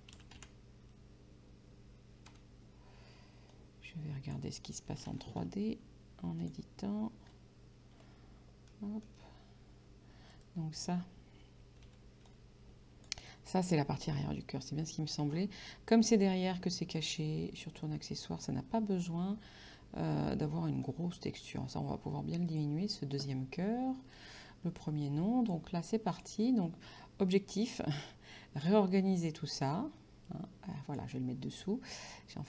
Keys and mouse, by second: 0.4 n, 2.3 n, 3.6 click, 5.7 Tab, 6.4 click, 8.7 middle click, 10.4 right click, 11.9 c, 12.3 click, 13.3 right click, 21.5 middle click, 22.5 click, 24.2 click, 26.2 click, 27.7 click.